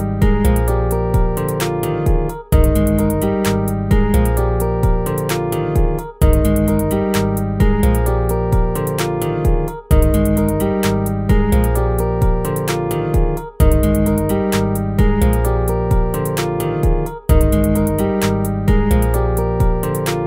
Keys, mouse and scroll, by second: 6.9 ctrl+z, 7.2 ctrl+z, 8.8 ctrl+z.